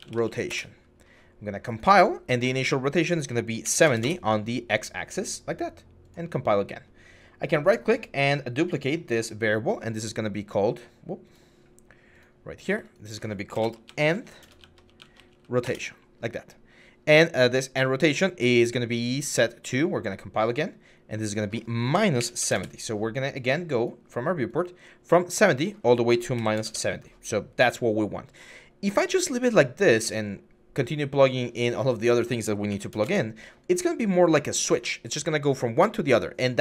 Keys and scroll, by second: 0.0-0.4 typing, 3.4 typing, 3.8 Return, 13.3-15.5 typing, 22.0-22.9 typing, 26.2-26.9 typing, 32.5 typing, 32.8 Return.